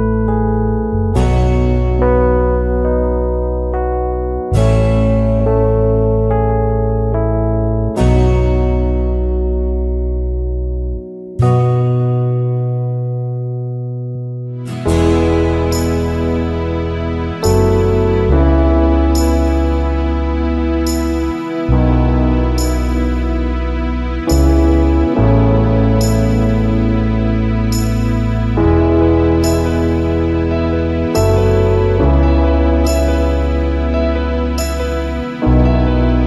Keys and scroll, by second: 4.3 space, 20.0 space, 30.1 space.